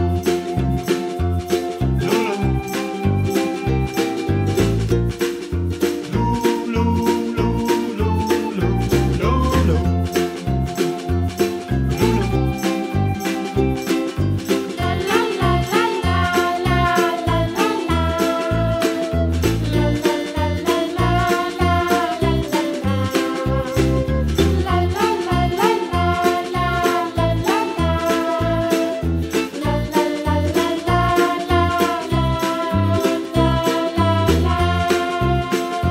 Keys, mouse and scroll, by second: 2.3 middle click, 3.0-4.2 scroll up 1, 4.6 middle click, 5.1-5.5 scroll down 1, 5.5 middle click, 6.1 click, 6.9 e, 8.7 middle click, 9.6 g, 10.7 click, 11.1 e, 11.2 s, 11.9 g, 14.3 e, 15.6 s, 16.6 e, 21.0 scroll down 1, 21.2-22.4 middle drag, 22.5 s, 23.2 e, 24.3 s, 25.6 scroll down 1, 25.7 middle click, 26.1 click, 26.6 e, 28.7 e, 30.9 e, 32.5 KP_Decimal, 32.8-33.8 middle drag, 33.8 s, 34.8 f, 35.0 scroll down 1, 35.2 middle click, 35.5 click, 35.7-35.9 scroll down 13.